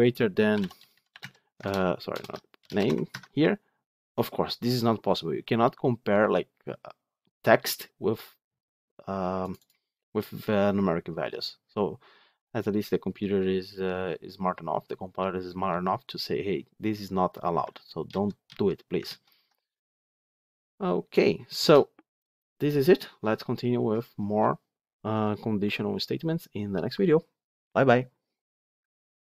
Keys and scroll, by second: 2.0 ctrl+BackSpace, 17.6 ctrl+z, 18.3 ctrl+z, 18.9 ctrl+z.